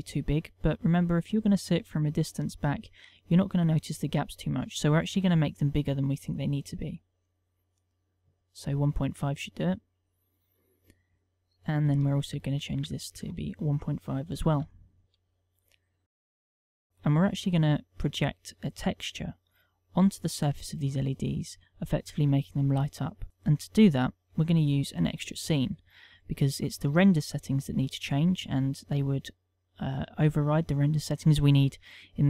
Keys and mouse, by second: 0.5 middle click, 1.1 ctrl+middle click, 1.6 middle click, 2.1 shift+middle click, 2.5 middle click, 3.9 ctrl+middle click, 4.4 middle click, 5.4 KP_1, 6.0 ctrl+middle click, 7.5 click, 10.0 click, 12.1 ctrl+click, 15.9 ctrl+middle click, 24.4 KP_1, 29.8 click.